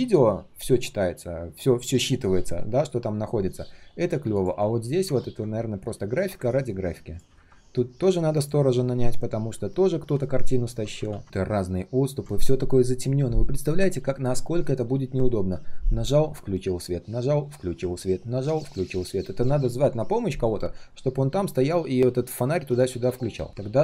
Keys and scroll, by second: 11.0 ctrl+z.